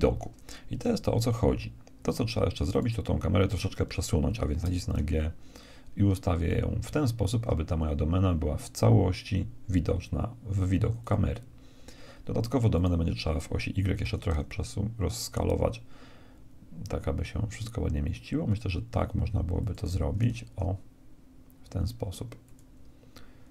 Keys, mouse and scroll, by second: 2.7-4.6 right drag, 4.6 g, 12.7-14.5 right drag, 14.0 s, 20.1 s.